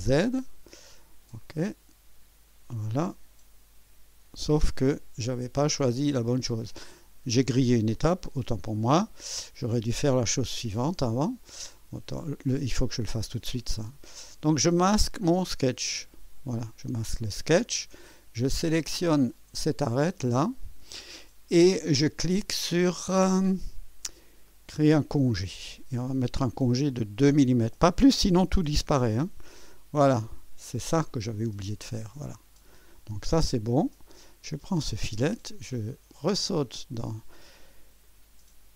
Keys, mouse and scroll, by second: 0.2 click, 1.4 click, 3.7-4.3 typing, 6.2 click, 7.9 click, 9.2 click, 10.4-11.2 drag, 11.4 click, 12.8 click, 13.8-14.9 drag, 15.7 space, 17.8 typing, 19.3 click, 19.9-20.8 drag, 24.4 click, 26.9 click, 28.3-29.2 typing, 30.1-32.0 drag, 32.1-33.1 drag, 34.4 click, 36.1 click, 38.0 click.